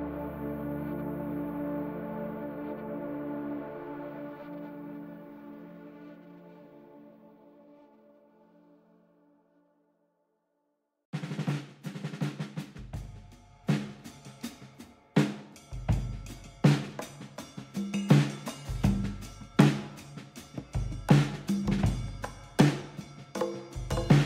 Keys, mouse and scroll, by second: 0.9 click, 1.2 middle click, 1.6 click, 2.2 g, 3.6 click, 4.0 middle click, 5.0 g, 6.9 click, 7.5 click, 8.5 z, 9.8 click, 10.0 middle click, 12.6 shift+click, 14.1 middle click, 14.1 scroll up 2, 14.3 middle click, 15.4 middle click, 15.5-16.1 scroll up 1, 16.1 shift+click, 16.9 shift+click, 17.0 middle click, 17.7 click, 18.7-20.2 scroll down 4, 19.0 middle click, 20.8 z, 21.6 middle click, 23.5 click, 23.8 middle click.